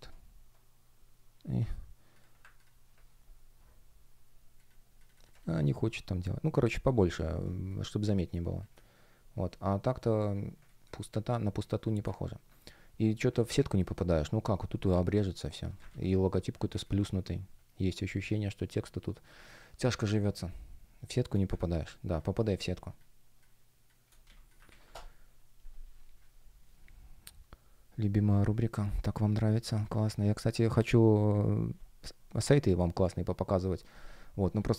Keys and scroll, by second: 7.4 space, 10.6 space, 13.1 shift+п, 15.8 super+я, 16.6 space, 20.0 space, 24.6 super+w.